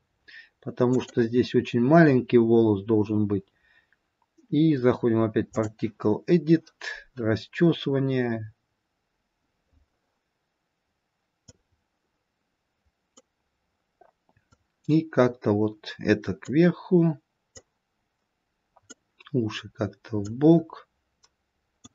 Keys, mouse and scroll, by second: 0.8 click, 7.6-8.3 scroll down 2, 8.3-9.4 scroll down 2, 9.4-10.3 scroll up 3, 11.1-11.8 scroll up 1, 11.8 click, 14.9 click, 20.7 click.